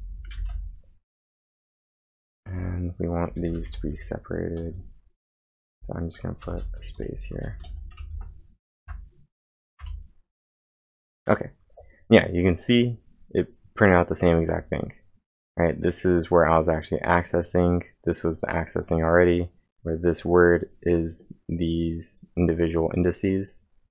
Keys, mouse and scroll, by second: 0.0-0.3 typing, 2.5 Return, 3.3-4.6 typing, 5.6-8.2 typing, 8.8 Up, 9.8 Return.